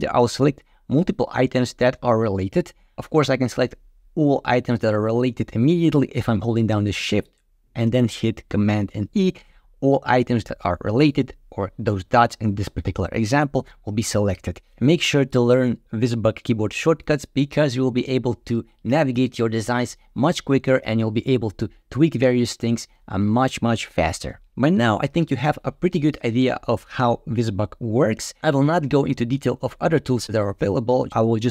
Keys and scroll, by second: 8.9 shift+super+e.